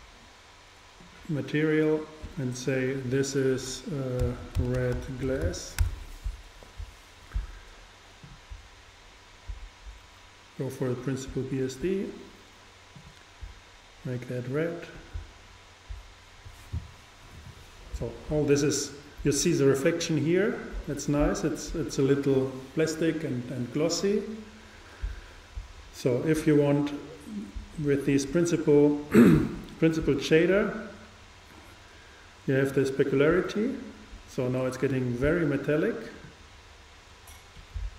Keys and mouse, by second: 2.0-4.7 drag, 8.3-11.2 drag, 13.0-14.9 drag, 32.9-34.7 drag, 36.3-37.9 drag.